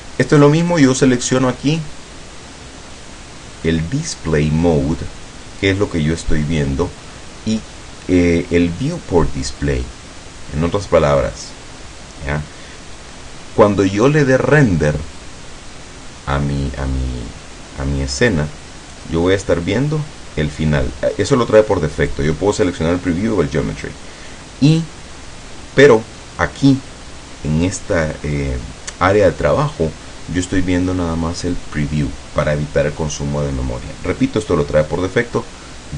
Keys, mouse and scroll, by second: 0.4 click, 0.9 click, 19.1 click, 22.1 click.